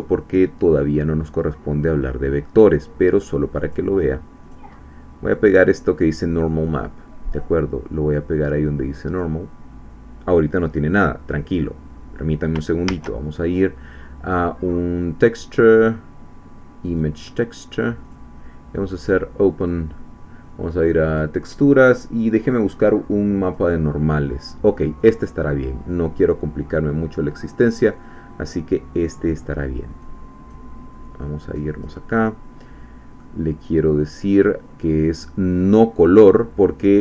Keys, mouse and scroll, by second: 3.6 click, 4.4 click, 6.8-9.4 drag, 12.9 shift+a, 16.8 click, 18.0 click, 19.0 click, 21.1 click, 23.5 click, 25.0 click, 28.2 scroll down 1, 30.0 click, 31.2 click, 32.1-33.6 middle drag, 34.0 click, 35.7 click.